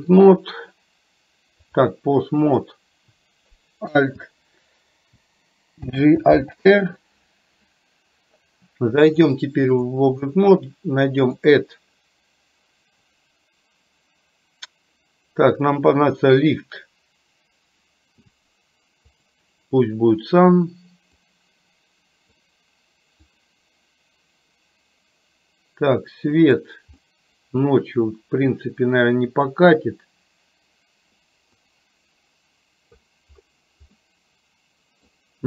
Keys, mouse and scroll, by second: 1.9-2.9 drag, 6.0 alt+g, 6.6 alt+r, 9.2 click, 11.5-19.5 drag, 21.4-22.5 drag, 23.5-26.9 drag, 27.2-27.9 middle drag, 28.6-29.6 drag, 31.7-33.1 drag, 34.1-35.2 middle drag.